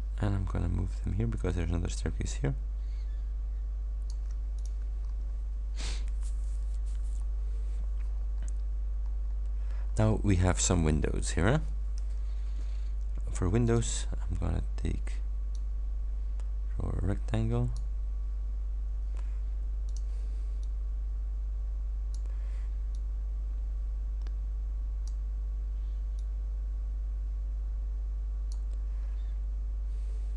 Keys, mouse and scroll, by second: 4.6 ctrl+click, 5.1 ctrl+scroll down 1, 7.3-8.7 scroll up 6, 9.1-9.6 scroll up 2, 9.9-10.3 scroll up 2, 13.7 click, 15.6-18.0 drag, 18.6 ctrl+scroll up 2, 19.9 click, 20.7-22.4 drag, 23.0-25.3 drag, 26.1-28.8 drag.